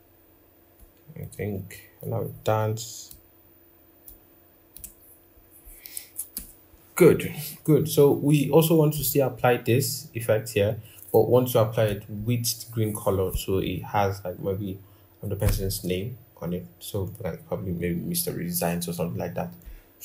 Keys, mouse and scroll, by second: 5.2 scroll, 5.5-5.9 scroll down 1, 6.1 ctrl+-, 6.8-7.4 scroll, 11.7-13.9 scroll up 1.